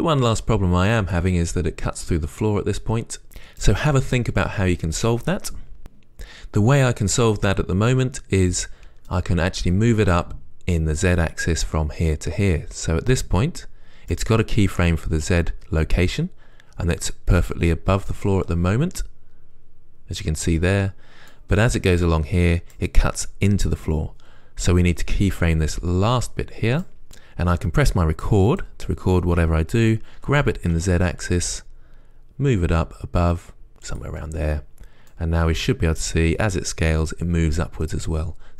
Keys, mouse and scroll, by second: 18.3-21.6 middle drag, 18.9 right click, 19.5-20.7 right drag, 21.6 right click, 24.3-27.1 right drag, 30.5 g, 34.3 click, 35.4-38.5 right drag.